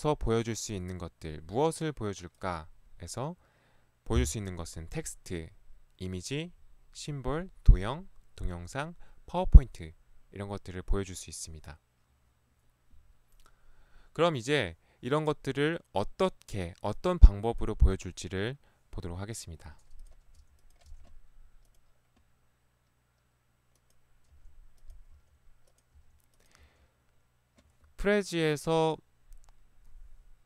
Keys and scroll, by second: 20.4 Delete, 20.9 Delete, 24.4 Delete, 25.2 Delete, 26.0 Delete, 27.2 Delete.